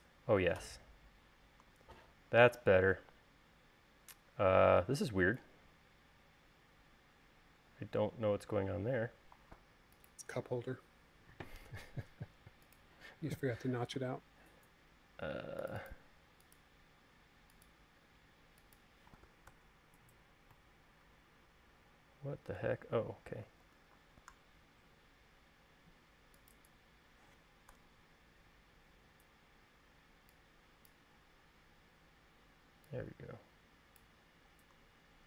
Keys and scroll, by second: 10.8 u, 20.1 BackSpace, 24.2 super+z, 28.2 BackSpace, 29.5 e, 35.0 l.